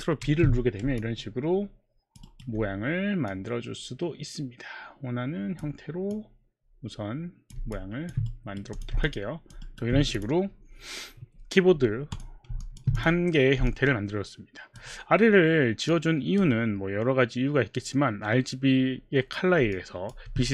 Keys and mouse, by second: 0.2 ctrl+b, 1.0 alt+click, 2.3 alt+right click, 6.1 click, 7.8 alt+click, 8.7 click, 9.1 alt+click, 9.6 alt+right click, 10.2 click, 12.1 click, 12.9 click, 13.7 alt+click, 15.9 alt+click, 19.7 alt+click, 20.3 alt+click.